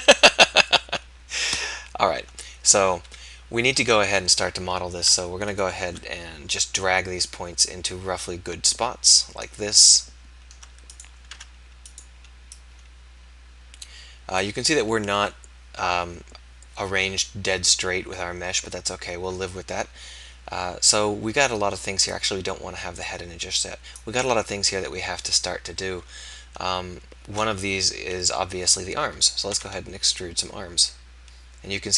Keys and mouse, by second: 3.0 KP_1, 10.9-12.5 drag, 11.3 g, 29.5 e.